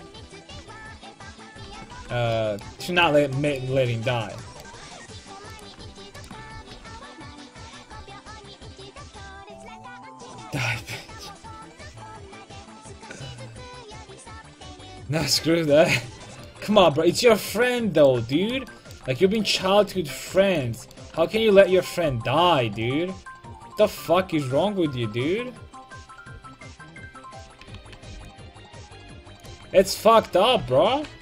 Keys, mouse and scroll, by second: 1.0 ctrl+x, 1.7 a, 2.0 ctrl+t, 2.2 a, 5.5-7.5 drag, 6.6 ctrl+x, 6.8 a, 7.2 ctrl+t, 7.4 a, 15.9-17.4 middle drag, 21.7 click, 22.1 c, 26.4 ctrl+x, 27.5 a, 27.8 a, 28.1 c, 29.4 click, 29.8 ctrl+x, 30.3 click, 30.7 ctrl+x, 31.1 a.